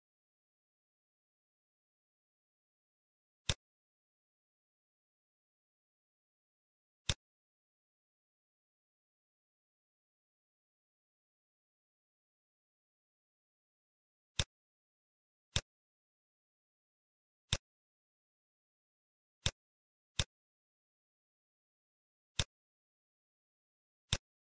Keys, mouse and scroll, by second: 0.7 middle click, 1.1-1.6 scroll up 4, 2.2 middle click, 3.4 click, 8.8 scroll down 4, 9.4 middle click, 10.0 scroll down 1, 10.5 middle click, 11.0-11.5 scroll down 6, 11.5 middle click, 12.2 middle click, 12.6 scroll up 4, 13.1 scroll down 1, 13.2 scroll down 2, 13.4 middle click, 14.3 click, 17.4 click, 18.6 shift+d, 20.1 click, 22.4 click, 24.1 click.